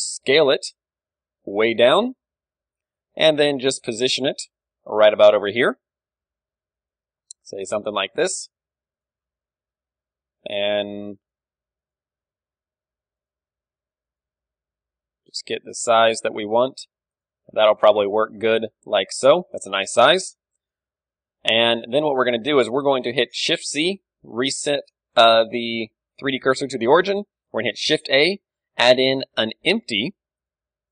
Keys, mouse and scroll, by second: 0.2 m, 0.8 ,, 1.3 s, 3.1-6.6 drag, 3.2 g, 5.6-7.1 middle drag, 5.6 s, 7.1-11.4 drag, 7.1 g, 9.5 z, 9.9 middle click, 10.6-14.3 typing, 11.4 middle click, 11.5-14.3 drag, 15.6 s, 16.7 g, 17.4 Tab, 17.6 click, 18.5 a, 20.0-21.6 middle drag, 21.6 click, 21.9-23.8 middle drag, 22.9 KP_7, 23.8 shift+c, 24.2-27.8 middle drag, 25.2 z, 25.8 KP_1, 27.8 shift+a.